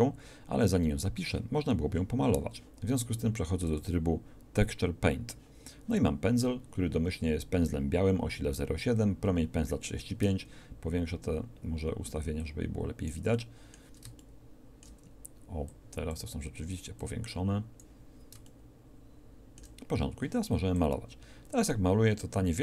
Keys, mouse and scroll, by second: 12.5 click, 15.7 ctrl+click, 17.0 click, 21.2-22.6 drag.